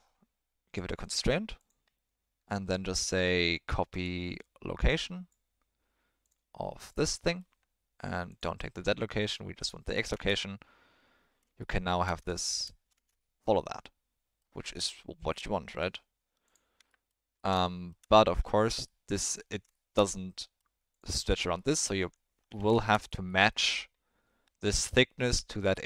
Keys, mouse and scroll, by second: 1.5-5.3 drag, 6.2 click, 7.2 middle click, 8.3 click, 9.6 click, 10.1 space, 11.6-12.0 shift+middle drag, 12.3-12.6 shift+middle drag, 12.9 space, 13.1 shift+middle drag, 13.5 middle click, 15.3 click, 17.6 shift+middle drag, 18.4 ctrl+middle click, 18.8 middle click, 19.7 shift+middle click, 20.1-20.5 middle drag, 21.5-21.8 middle drag, 22.0 Tab, 22.4 3, 22.7 shift+middle click, 23.3 middle click.